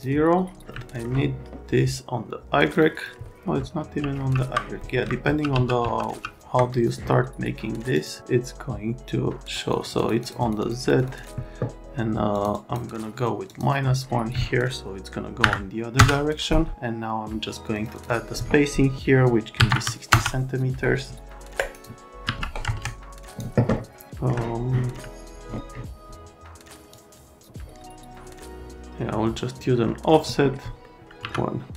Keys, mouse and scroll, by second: 0.7 alt+right click, 2.7 middle click, 3.0 middle click, 3.8 ctrl+z, 4.1 ctrl+z, 4.8 right click, 5.2 ctrl+z, 5.5 ctrl+z, 7.9 click, 9.4 click, 9.7 click, 10.0 click, 10.2 click, 10.4 click, 10.6 click, 10.8 click, 11.0 click, 11.2 click, 12.3 click, 12.5 click, 13.5 click, 15.4 KP_Subtract, 15.9 KP_Enter, 17.7 click, 17.9 click, 19.6 KP_6, 19.7 KP_0, 20.1 KP_Enter, 21.5 click, 22.2 1, 22.7 KP_Enter, 23.0 click, 24.0 alt+right click, 24.9 right click, 26.9 click, 30.8 middle click, 31.2 1.